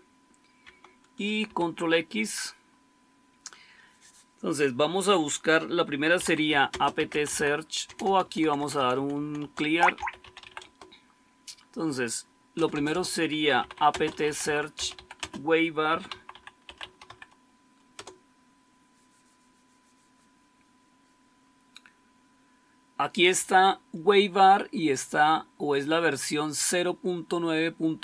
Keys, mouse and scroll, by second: 1.4 ctrl+x, 5.7-10.9 typing, 12.5 Return, 12.6 Return, 12.9 Return, 13.1-17.5 typing, 17.8 Return.